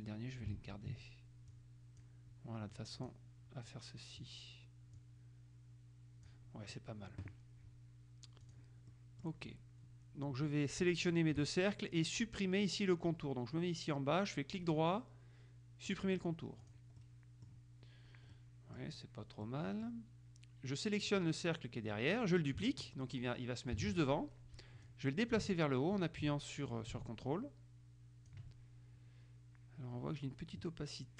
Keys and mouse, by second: 0.7 ctrl+z, 1.7-2.7 drag, 2.9 click, 5.1-6.9 drag, 8.6 click, 9.1 middle click, 11.2 shift+click, 14.7 right click, 16.0 click, 16.7 click, 17.2 middle click, 18.5 middle click, 19.6 middle click, 21.3 click, 23.9 ctrl+d, 25.0-28.9 drag.